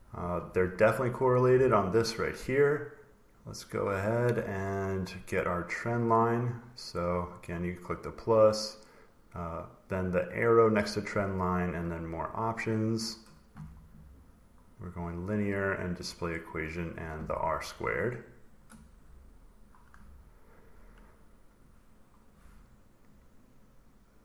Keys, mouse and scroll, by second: 3.3 click, 7.5 click, 7.9 click, 10.6 click, 12.9 click, 14.7 click, 15.8 click, 16.4 click, 18.4 click, 20.5 click, 22.2 click, 23.0 click.